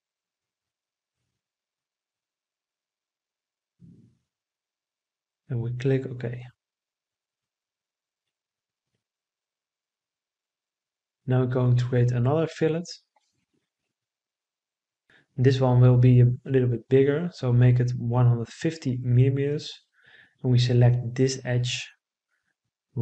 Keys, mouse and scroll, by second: 4.7-5.8 right drag, 16.4 1, 16.9 5, 17.4 0, 18.1 Return.